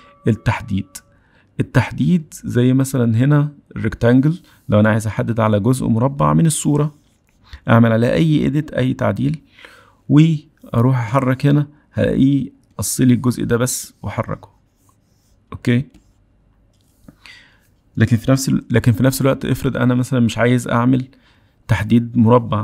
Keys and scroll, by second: 2.6 m.